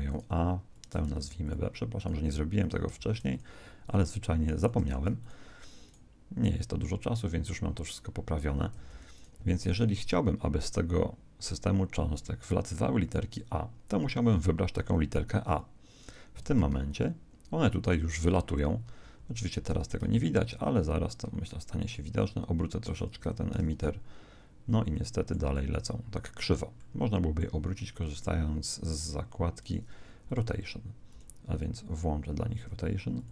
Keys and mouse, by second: 0.5 right click, 1.8 click, 2.5 right click, 3.7 click, 4.4 right click, 5.5 click, 5.5 right click, 8.7 z, 9.1 right click, 9.3 z, 13.0 click, 16.7 alt+a, 19.1 Escape, 19.7 r, 23.7 alt+a, 24.9-28.6 middle drag, 30.3-32.7 drag.